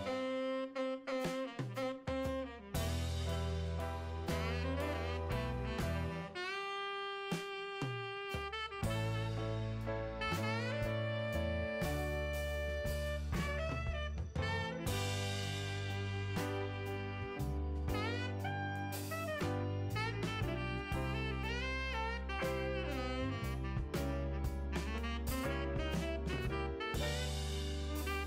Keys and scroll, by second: 8.1-8.9 typing, 10.4 Down, 11.7 Return, 24.9-25.8 typing, 27.9 Return.